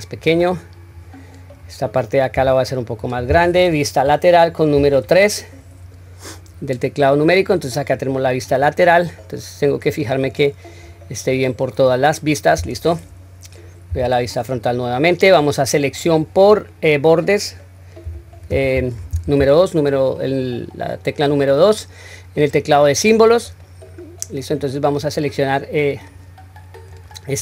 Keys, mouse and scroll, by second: 0.9 click, 2.4 s, 4.8 KP_3, 10.2-12.7 middle drag, 13.9 KP_1, 14.5-16.9 scroll up 1, 23.6-24.5 middle drag, 24.7-25.1 scroll down 1, 25.1-26.1 middle drag, 26.9 click.